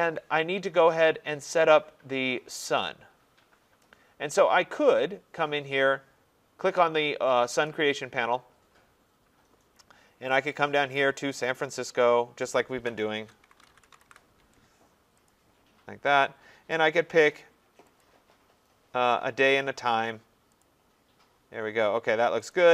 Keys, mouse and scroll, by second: 7.7 click, 11.5 click, 12.6 click, 12.9-14.6 typing, 15.3 click, 16.7 click, 18.0 click, 20.6 click, 22.5 click.